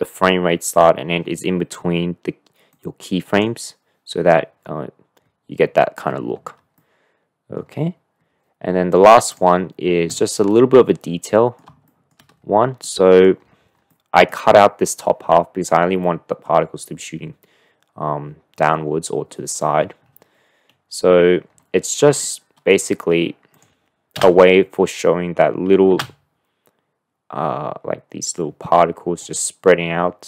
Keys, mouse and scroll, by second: 2.7-3.4 drag, 6.8 click, 6.9-7.6 middle drag, 9.3 click, 10.1 click, 10.8-11.3 drag, 11.3 middle click, 11.4 click, 11.5 middle click, 11.8 shift+middle drag, 12.8-13.2 middle drag, 13.9-14.2 middle drag, 16.0-16.4 middle drag, 22.2-22.7 middle drag, 24.2 space, 26.3 space.